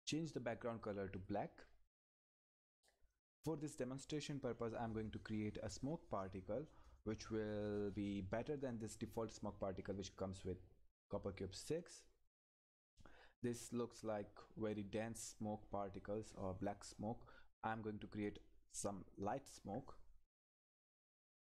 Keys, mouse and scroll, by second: 0.8 click, 9.8 click, 12.0-13.9 scroll down 1.